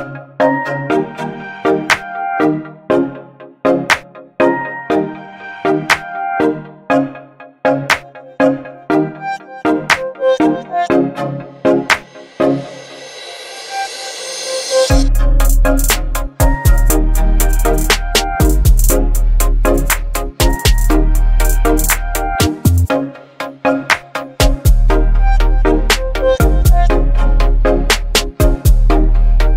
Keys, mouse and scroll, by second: 3.7 ctrl+g, 5.3 click, 6.1-7.7 typing, 7.8 Return, 12.7 Return, 12.7 click, 14.7-15.1 alt+scroll up 1, 15.7-16.3 click, 16.2 space, 16.6 b, 17.4 right click, 18.0 scroll up 1, 19.3-19.9 drag, 21.7-22.7 alt+right click, 22.8 alt+scroll up 1, 23.5 space, 23.5-24.1 click, 24.0 space, 24.6-25.5 alt+right drag, 27.0-28.2 drag.